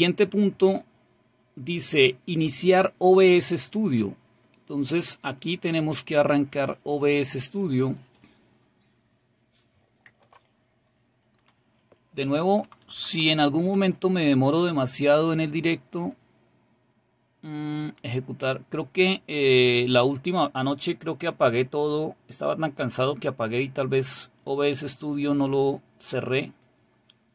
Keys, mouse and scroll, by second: 3.9-6.4 scroll down 1, 7.1 click, 26.5 click.